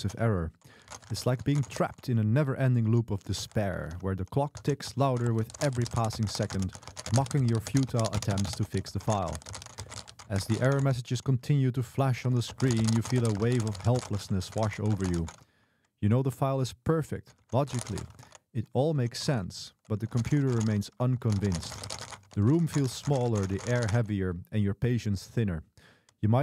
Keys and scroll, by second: 0.0-2.6 typing, 9.2 typing, 10.4 Escape, 10.7-18.7 typing, 13.8 Escape.